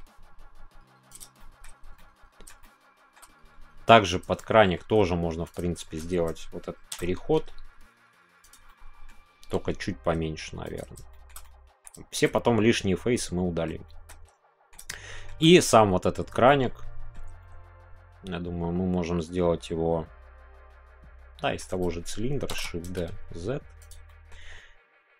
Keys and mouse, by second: 1.1 click, 1.3 shift+middle click, 1.9-2.5 middle drag, 2.6 shift+middle click, 4.4 shift+middle click, 5.5 click, 5.7 shift+middle click, 6.9 shift+d, 7.2 z, 8.5 click, 8.6 middle click, 11.1-11.8 middle drag, 12.0 shift+middle click, 12.3-13.6 middle drag, 13.8 shift+middle click, 14.3 middle click, 14.9-15.3 shift+middle drag, 16.4 shift+middle click, 17.3-21.5 middle drag, 22.5 shift+d, 23.8 click, 24.0 middle click.